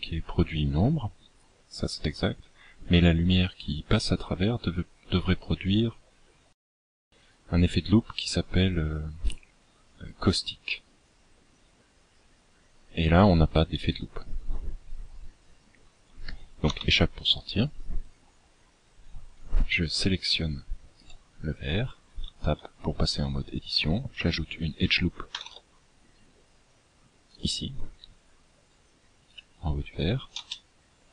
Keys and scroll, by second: 16.4 Escape, 20.2 Tab, 21.8 Tab, 25.0 ctrl+r, 30.0 space.